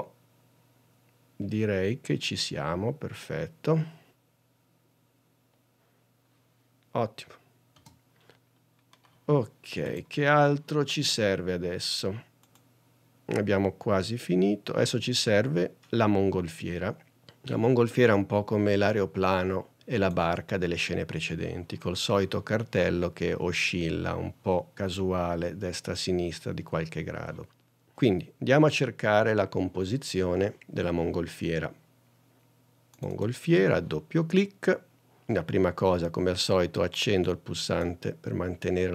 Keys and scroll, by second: 8.8 space.